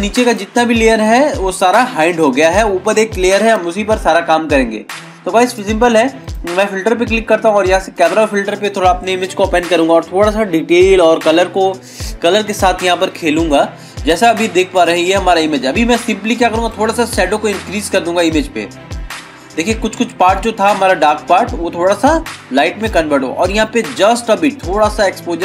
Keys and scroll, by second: 4.1 ctrl+=, 4.5 ctrl+-.